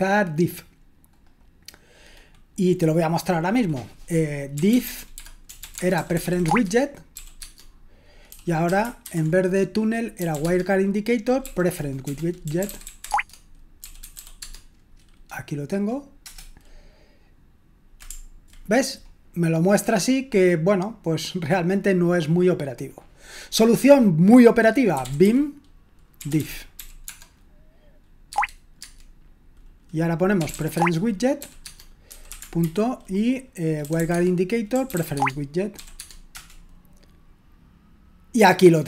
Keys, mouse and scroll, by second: 1.1-4.5 scroll down 1, 4.3-15.1 typing, 16.2 Return, 22.7-24.9 scroll down 1, 24.7-27.2 typing, 28.3 Tab, 28.8 typing, 30.1-36.7 typing.